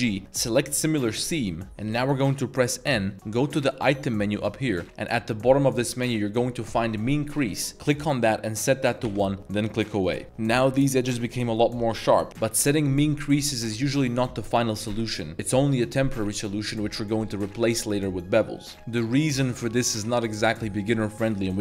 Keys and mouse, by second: 1.9 n, 8.0-10.1 drag, 10.2 Tab, 10.5-10.9 middle drag, 11.3 middle click, 11.9-12.2 middle drag.